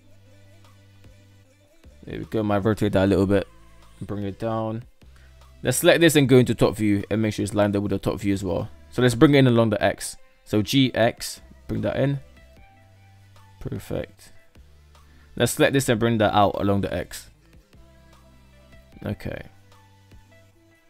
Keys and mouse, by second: 0.4 shift+middle click, 1.4 r, 2.6 g, 3.9 shift+middle click, 4.8 click, 6.3 KP_7, 7.2 shift+middle drag, 8.8 g, 12.2-13.2 shift+middle drag, 14.1 click, 15.2 g, 20.4 shift+middle click.